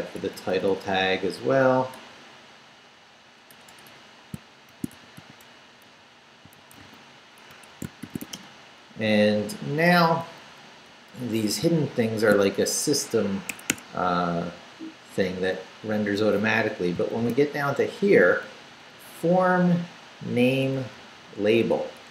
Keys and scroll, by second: 0.0 Right, 1.9-8.7 typing, 7.5 Escape, 9.0 Down, 9.9 Left, 10.9 Left, 11.6 shift+Left, 11.8 shift+v, 13.5 Escape, 15.2 Down, 17.2 shift+v, 18.5 Left, 18.9 Right, 19.8 Right, 20.7 Right, 21.8 Left.